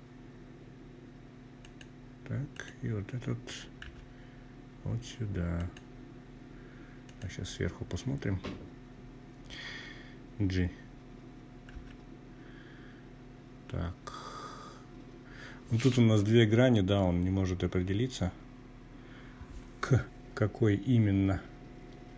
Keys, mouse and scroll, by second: 0.5 click, 1.8 g, 3.6 click, 5.0 click, 9.7 g, 21.2 click.